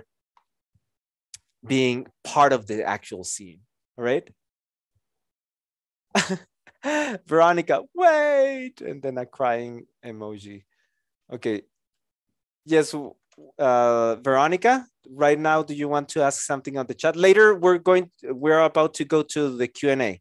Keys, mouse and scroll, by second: 11.4 KP_0, 13.3 KP_0.